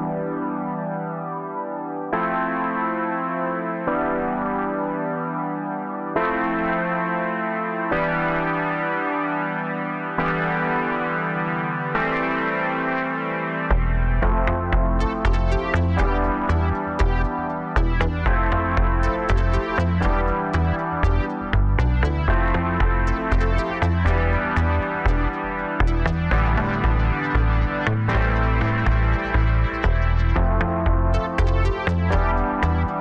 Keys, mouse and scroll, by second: 2.2 KP_1, 2.6 Tab, 3.1-3.9 scroll up 1, 3.9 3, 4.2 scroll down 2, 4.5-6.2 middle drag, 6.2 KP_3, 6.7-7.0 scroll up 1, 7.8 click, 8.4 shift+click, 9.1 KP_1, 9.7-10.6 scroll down 2, 10.6 ctrl+KP_6, 10.7-33.0 ctrl+KP_6, 12.0 click, 13.3 g, 18.4-19.7 middle drag, 19.7 KP_3, 20.2 scroll up 2, 21.5 i, 25.8 click, 26.7 s.